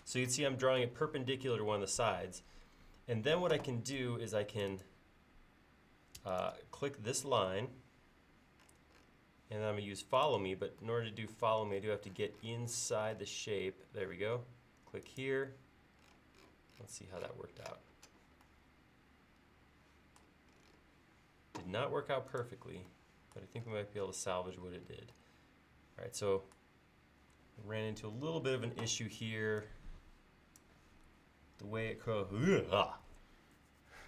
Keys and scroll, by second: 4.0 space, 27.1 l.